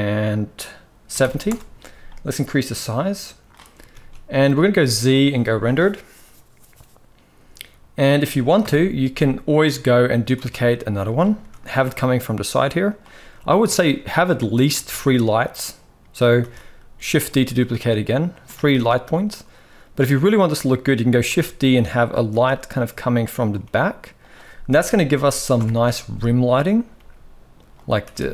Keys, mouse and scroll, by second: 3.7 ctrl+s, 4.4 z, 8.3 KP_7, 10.1 shift+d, 11.1 r, 13.5-14.1 shift+middle drag, 14.5 shift+f, 16.1 shift+d, 17.2 r, 18.3 g, 21.0 shift+d, 22.0 r, 23.4 g, 24.4 KP_0, 25.3 KP_1, 26.7 g.